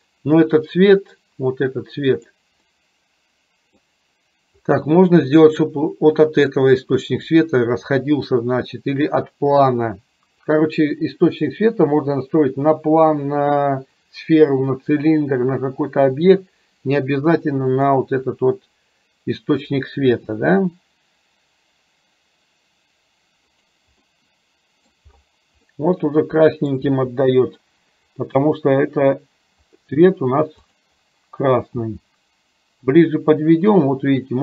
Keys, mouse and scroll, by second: 2.3 click, 2.8-3.9 middle drag, 17.9 click, 20.3 g, 24.1-25.0 middle drag, 25.0 scroll down 1, 25.8-26.8 middle drag, 26.9 g, 32.0 g.